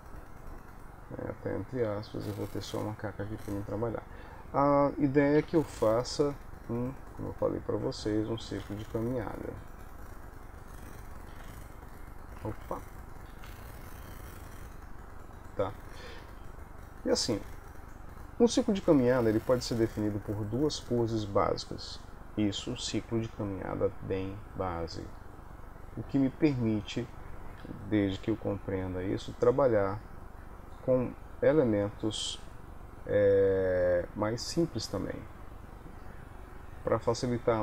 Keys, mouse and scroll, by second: 2.1 middle click, 3.3 KP_3, 5.5 Home, 8.0 ctrl+s, 8.3 click, 8.8 alt+r, 10.6 click, 11.5 alt+r, 12.6 ctrl+z, 13.4 r, 19.1 shift+middle click.